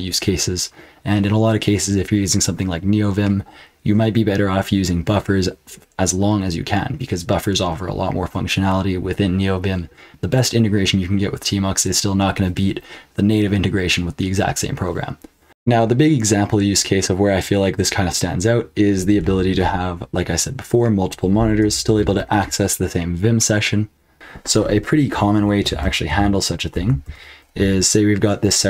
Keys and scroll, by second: 15.4 F12, 19.2 BackSpace, 21.6 super+Return, 25.7 ctrl+p, 26.1 ctrl+p, 27.0 ctrl+w.